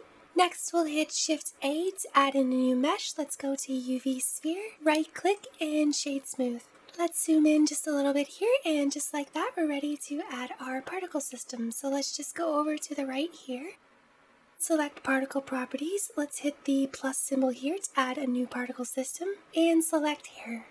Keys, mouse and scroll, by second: 1.0 shift+a, 4.6 right click, 6.5-7.4 scroll up 4, 7.4-8.2 shift+middle drag, 8.2-8.6 scroll down 1, 8.6-11.6 middle drag, 14.1-19.3 drag, 19.8 click.